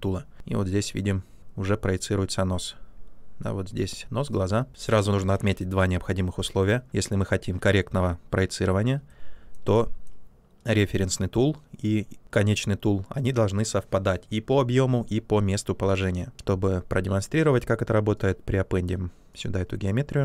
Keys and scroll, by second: 6.9 ctrl+z.